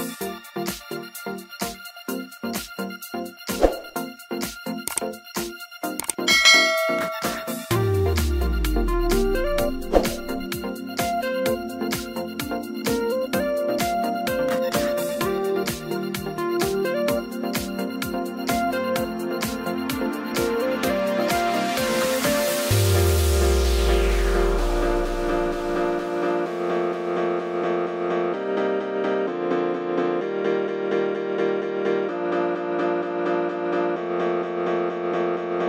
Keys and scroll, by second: 0.0-0.1 typing, 1.6 Return, 6.3 k, 6.6 n, 6.8 o, 8.4-9.9 typing, 12.1 Return, 14.8-18.9 typing, 20.1 Return, 22.6 y, 23.8-27.0 typing, 27.6 Return, 30.8-33.0 typing, 33.9 Return.